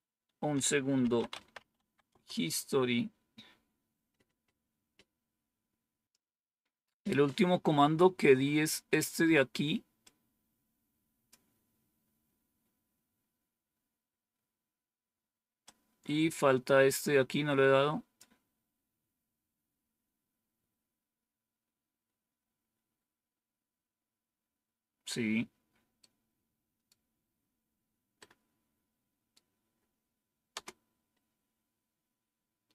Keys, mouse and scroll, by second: 0.7-2.5 typing, 6.0 click, 8.8 click, 9.9-11.2 drag, 15.5-18.9 drag, 25.9-27.5 right drag, 28.1-30.4 right drag, 30.4 Return.